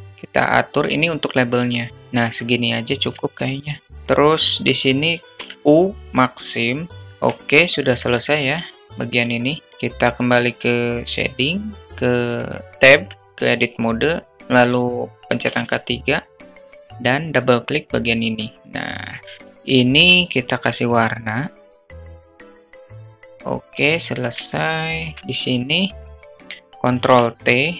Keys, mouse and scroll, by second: 3.1 alt+middle click, 4.8 u, 6.9 Tab, 8.0-9.6 drag.